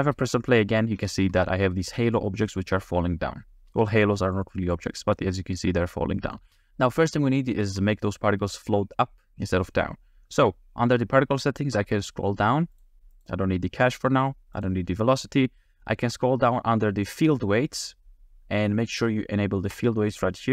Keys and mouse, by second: 0.5 middle click, 1.1 shift+middle click, 2.5 middle click, 3.5 space, 4.4-4.7 drag, 5.0 space, 5.6-6.3 middle drag, 6.4 space, 7.5 shift+middle drag, 12.7 click, 13.1 click, 14.6 click, 17.1 click, 19.7 click.